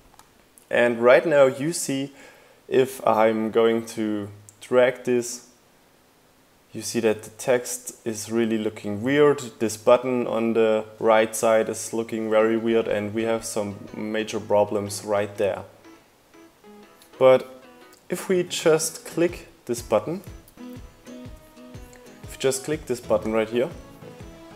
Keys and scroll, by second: 19.4 super+z.